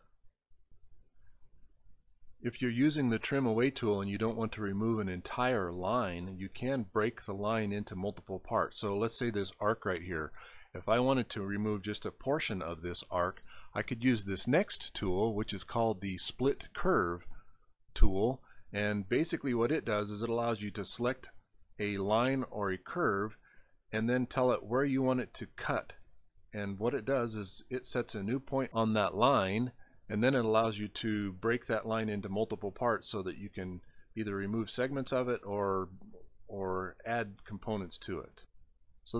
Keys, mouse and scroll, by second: 2.8 middle click, 3.3 scroll up 7, 3.6 scroll, 5.8 scroll, 6.5 scroll down 1, 17.7 click, 19.7 scroll up 1, 19.9 scroll down 6, 23.3 click, 27.8 click, 30.0 click, 33.2 click.